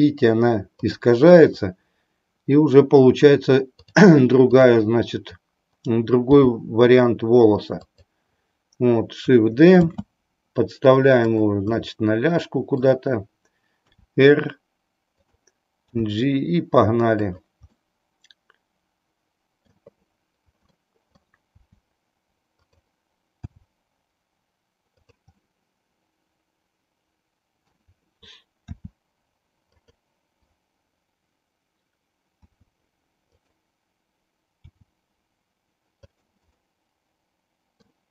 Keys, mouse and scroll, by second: 3.8 click, 6.2 g, 8.0 click, 9.9 shift+d, 11.7-12.9 middle drag, 13.9 r, 15.1 click, 16.0 g, 17.2 click, 17.7-19.9 middle drag, 20.9 middle click, 21.5 r, 22.6 click, 23.5 g, 25.0 click, 25.5-27.9 middle drag, 28.9 r, 29.9 click, 32.4 s, 33.4 click, 34.6 g, 36.3 click, 36.6-38.0 middle drag.